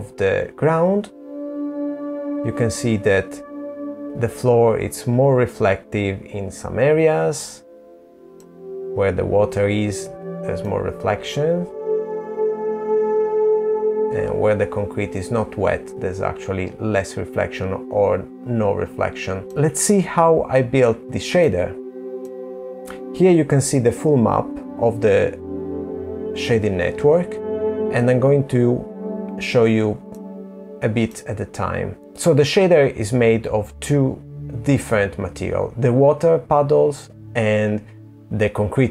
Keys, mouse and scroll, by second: 8.9 middle click, 18.4 middle click, 19.7 middle click, 28.1 middle click, 30.4 middle click.